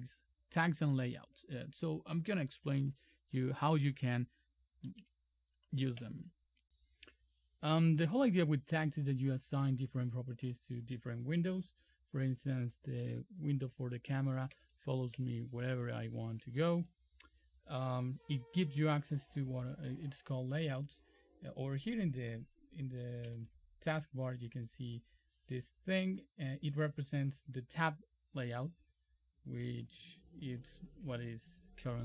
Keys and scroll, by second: 6.0 F11, 13.7 super+4, 14.6 super+5, 15.2 super+4, 15.8 super+3, 23.4 ctrl+F10, 30.8 ctrl+F10.